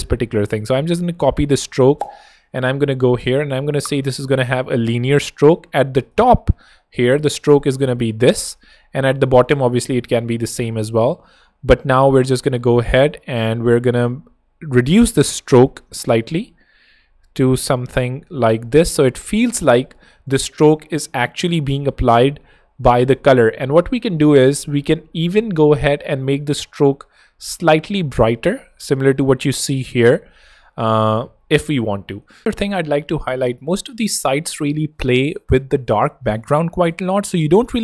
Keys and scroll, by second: 0.6 super+c, 1.0 super+Escape, 7.5 super+v, 7.7 super+Tab, 8.6 Tab, 10.3 super+v, 10.5 super+Tab, 10.9 Escape, 11.8 super+Escape, 12.9 super+Escape, 29.0 super+Tab, 30.5 super+Tab, 31.8 Escape.